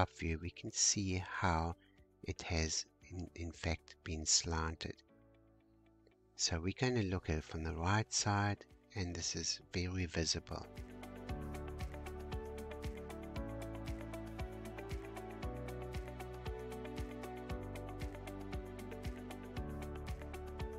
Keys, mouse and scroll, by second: 2.6-3.0 scroll down 2, 6.5 scroll down 2, 7.9 shift+middle click, 8.5-9.7 shift+scroll down 1, 12.4-12.9 scroll down 1, 14.1-17.1 shift+middle drag.